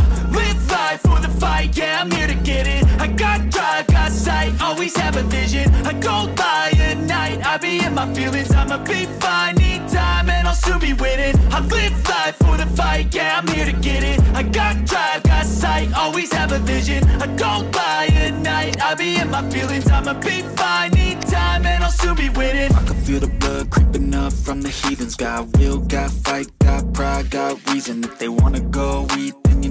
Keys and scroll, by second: 14.3 v, 26.6 d, 26.9 /.